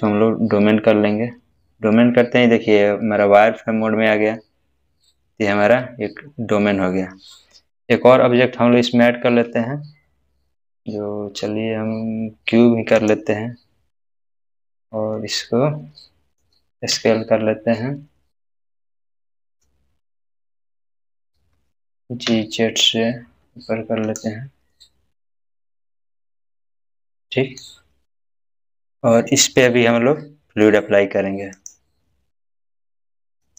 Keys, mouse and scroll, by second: 6.3 click, 6.5-8.1 scroll up 1, 9.1 scroll up 1, 9.3 shift+a, 13.0 click, 15.2-16.4 middle drag, 17.0 s, 19.5 s, 21.4 g, 22.3 z, 24.1 click, 24.7-27.8 middle drag, 31.6 click.